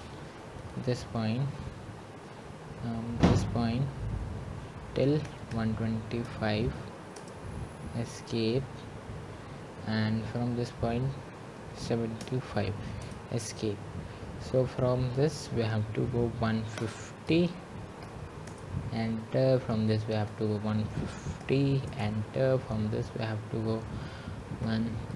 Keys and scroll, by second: 5.6 Escape, 7.2-8.0 typing, 11.9 Return, 13.1-13.8 typing, 17.0 Return, 18.5-19.3 typing, 20.7 Return, 25.0 Return.